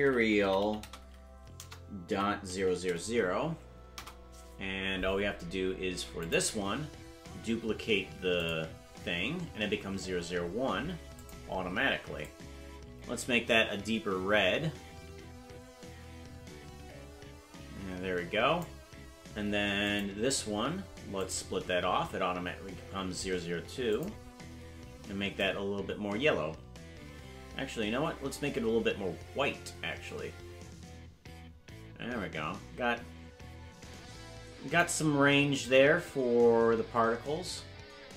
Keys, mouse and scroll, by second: 2.6 0, 6.2 click, 8.3 click, 11.1 click, 19.8 click, 21.2 click, 23.9 click.